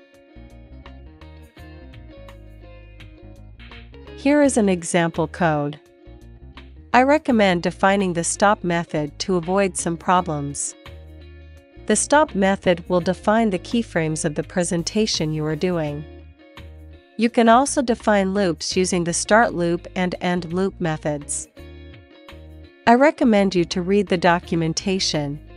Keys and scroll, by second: 0.0-0.1 typing.